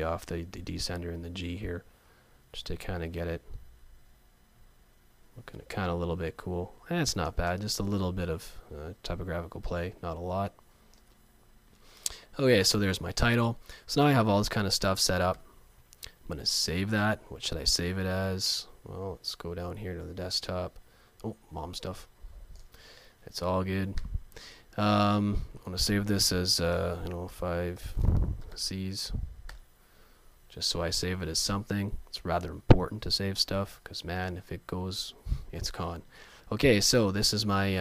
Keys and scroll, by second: 3.2 Down, 15.4 super+s, 29.5 Return.